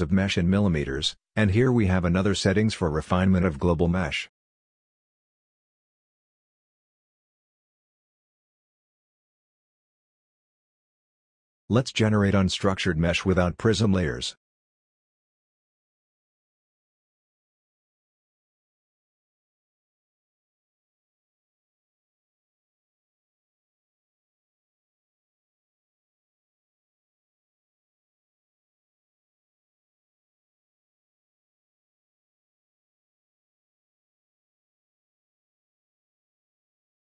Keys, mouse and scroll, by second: 34.2 scroll down 1, 34.4-34.9 scroll up 1.